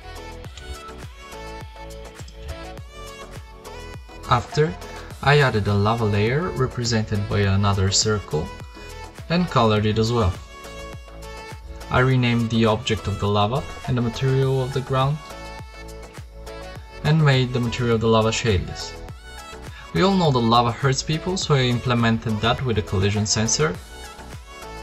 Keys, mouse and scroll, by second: 3.5 shift+a, 4.8 s, 6.8 Tab, 7.0 f, 7.1 Tab, 14.1 right click, 20.9-22.1 drag, 22.2-23.2 drag, 24.6 click.